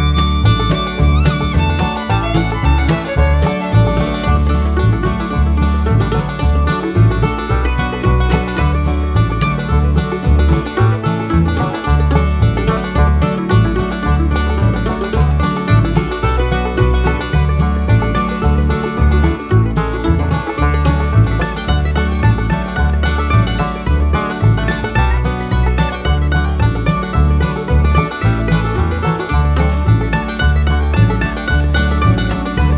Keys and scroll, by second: 3.8 1, 4.1 2, 8.7 -, 25.4 ctrl+a.